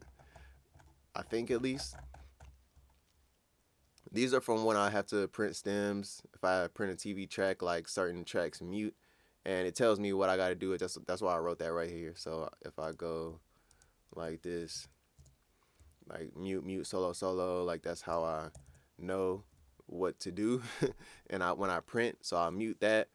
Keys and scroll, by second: 14.7 ctrl+Up, 15.2 ctrl+Up, 18.5 ctrl+Down, 18.7 ctrl+Down.